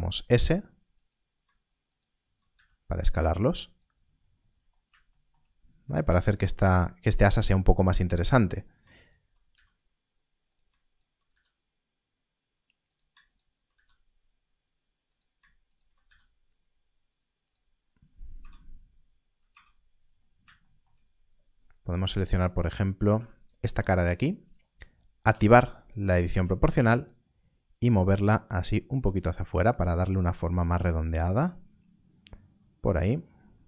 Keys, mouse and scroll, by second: 0.9 s, 1.8 alt+click, 2.4 s, 3.6 click, 3.9 scroll down 1, 6.1 scroll up 1, 9.0 alt+click, 9.4 s, 10.4 click, 11.3 s, 12.8 click, 13.6 s, 15.0 click, 15.9 s, 17.4 click, 17.7 scroll down 1, 18.3 Tab, 19.4 Tab, 19.8 scroll up 1, 25.2 3, 25.3 0, 27.2 scroll up 1, 30.6 click, 31.4 scroll down 1.